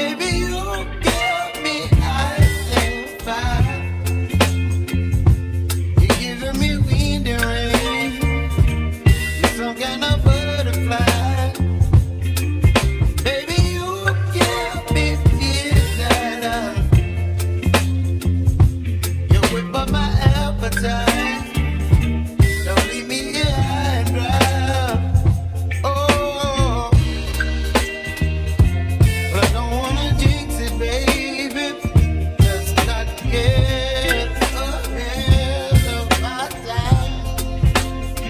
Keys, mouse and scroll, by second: 1.4-2.9 middle drag, 2.9 ctrl+z, 3.8 a, 5.9 s, 9.6-12.1 middle drag, 14.8-17.8 shift+middle drag, 19.2-19.7 scroll up 4, 19.7-20.6 scroll down 2, 20.6-22.5 shift+middle drag, 22.5 ctrl+z, 22.9 ctrl+z, 23.2 ctrl+z, 27.5 1, 30.0 1, 32.0 3, 34.0 alt+e, 34.7 alt+e.